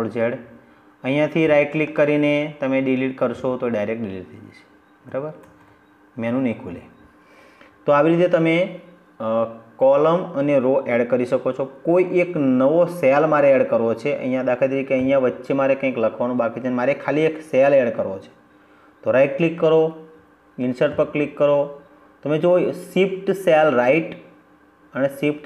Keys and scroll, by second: 4.3 ctrl+z.